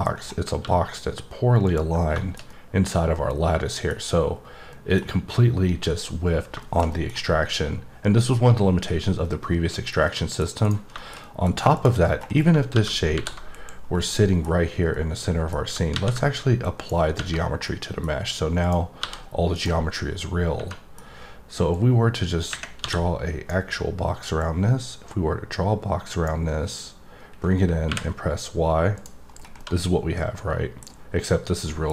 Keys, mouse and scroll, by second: 0.1 scroll up 1, 1.6 click, 2.1 middle click, 2.5-4.0 middle drag, 4.3-4.7 scroll down 2, 4.7 middle click, 6.6 middle click, 6.9 double middle click, 10.0 middle click, 10.6 right click, 11.2 middle click, 11.5 scroll up 1, 11.7 click, 12.0-12.7 scroll down 5, 13.9 scroll down 2, 14.1 middle click, 14.9 middle click, 16.8 click, 17.6 middle click, 18.6 click, 19.5 right click, 20.7 middle click, 21.7-23.6 drag, 24.4 click, 29.4 scroll down 1, 29.6 middle click, 31.6 middle click.